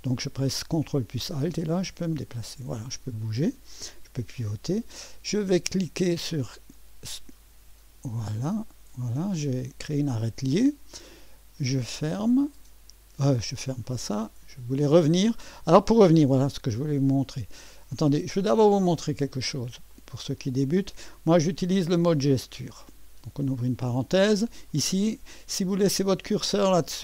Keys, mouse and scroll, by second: 1.5 click, 6.3 click, 8.2 click, 12.0 click, 13.8 click, 14.0 click, 16.7 click, 18.3 click, 19.9 click, 24.7 click, 25.5 click, 26.0-27.0 drag.